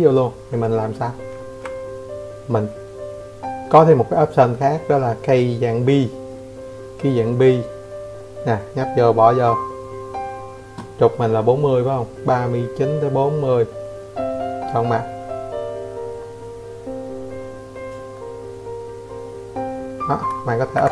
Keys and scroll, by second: 12.8 Escape, 13.0 Escape, 13.8 Escape, 15.0 Escape, 15.1 Escape, 18.8 Escape, 18.9 Escape, 19.1 Escape.